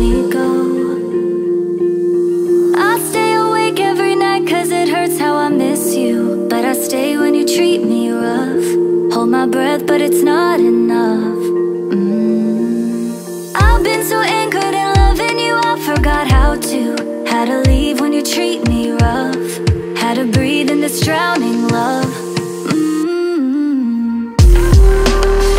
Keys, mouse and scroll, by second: 1.9 ctrl+d, 3.3 ctrl+scroll down 1, 5.2 ctrl+click, 5.7 ctrl+click, 10.3 ctrl+click, 14.6 ctrl+click, 17.4-18.1 scroll down 1, 18.2 ctrl+click, 18.7 ctrl+click, 19.5 right click.